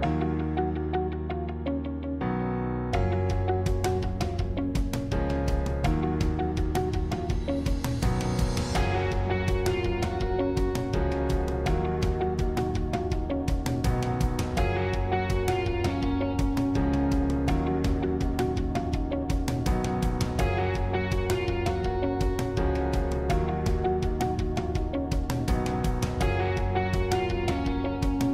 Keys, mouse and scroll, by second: 1.1 alt+shift+click, 2.0-11.6 middle drag, 11.6 click, 13.5 click, 16.4 g, 18.4-20.3 middle drag, 20.3 click.